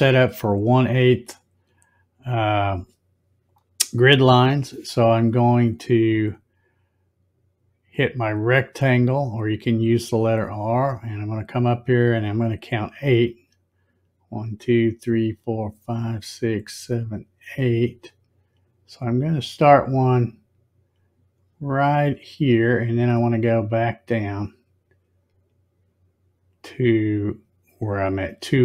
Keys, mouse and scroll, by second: 10.2 click, 19.7-28.6 drag, 24.0-24.8 scroll down 1.